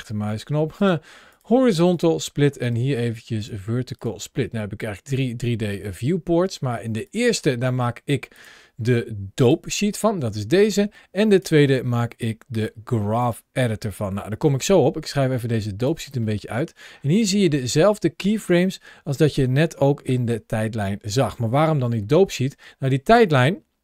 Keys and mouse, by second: 0.8-1.9 right drag, 2.5-3.9 right drag, 7.0-7.8 drag, 8.3-9.3 drag, 11.2-13.2 drag, 15.1 click, 16.2 middle drag, 17.2 middle click, 17.8-18.9 middle drag, 18.9 ctrl+shift+a.